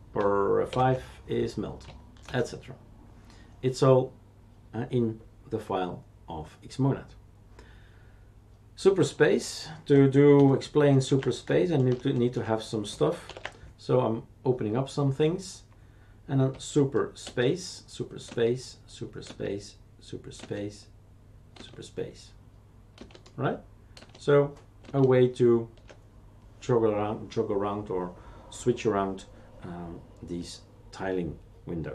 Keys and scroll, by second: 0.7 super+F5, 2.2 shift+super+q, 10.3 ctrl+alt+t, 11.9 shift+super+Return, 17.2 super+space, 18.3 super+space, 19.2 super+space, 20.4 super+space, 21.5 super+space, 22.9 super+space, 24.1 super+space, 24.8 super+space.